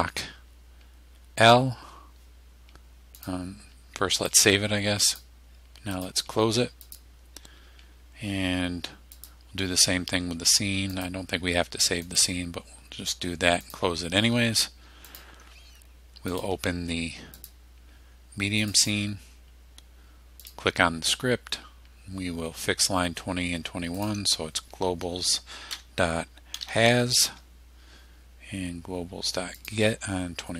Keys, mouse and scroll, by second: 1.5 click, 3.2 click, 4.2 click, 5.1 click, 6.0 click, 6.9 click, 9.2 click, 11.0 click, 12.1 click, 13.7 click, 15.1 click, 16.4 click, 17.4 click, 18.7 click, 20.5 click, 24.0 click, 25.8-27.3 typing, 27.3 Tab, 29.6 click.